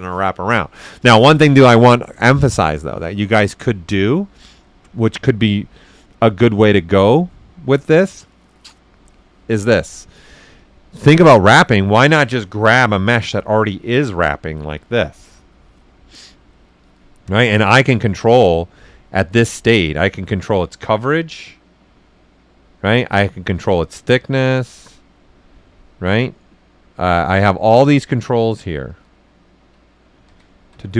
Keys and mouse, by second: 10.5 click, 13.4 alt+right click, 17.2 click, 19.0-20.5 drag, 20.5-27.6 drag, 27.6 click, 28.9 ctrl+z, 30.2 ctrl+z.